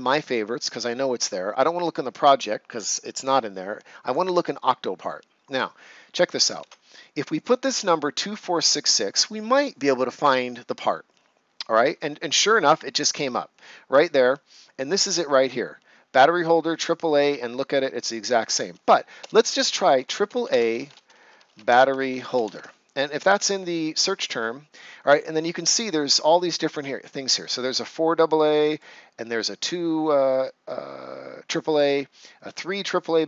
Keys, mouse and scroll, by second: 4.0 click, 10.2 Return, 19.2-22.8 typing, 27.0 click, 31.7 click.